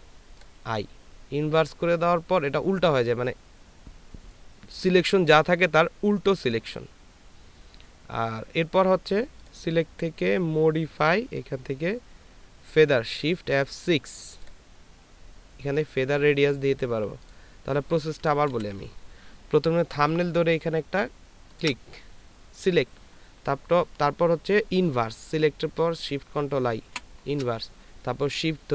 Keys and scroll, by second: 18.6 ctrl+d, 26.9 ctrl+shift+i.